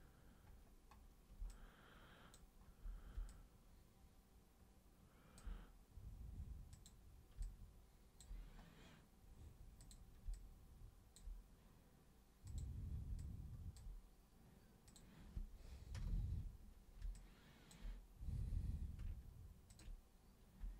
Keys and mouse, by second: 1.4 alt+super+click, 3.2-5.3 alt+super+drag, 6.7 super+click, 7.4 alt+super+click, 9.7 super+click, 10.3 alt+super+click, 12.5 super+click, 13.2 alt+super+click, 14.8 super+click, 15.9 super+Return, 17.1 alt+super+click, 19.6 ctrl+super+click.